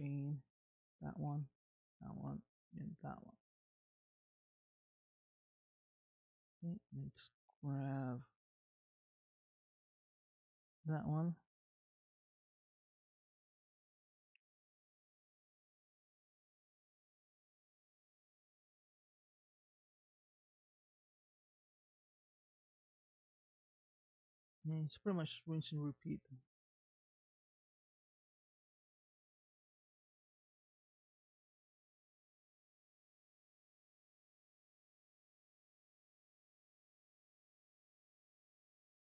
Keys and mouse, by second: 1.3 e, 2.2 e, 3.7 middle click, 5.0-6.4 middle drag, 6.7-7.8 middle drag, 8.8 click, 9.9 click, 12.0 e, 13.0 middle click, 14.0 e, 14.8 e, 15.8 e, 16.7 middle click, 18.3 e, 19.7-21.4 middle drag, 21.9 click, 22.8-24.8 middle drag, 26.2 e, 27.6-28.8 middle drag, 29.4 e, 30.3-31.4 middle drag, 31.9 e, 33.1 middle click, 34.6 click, 35.4 middle click, 36.7 e, 38.3 e.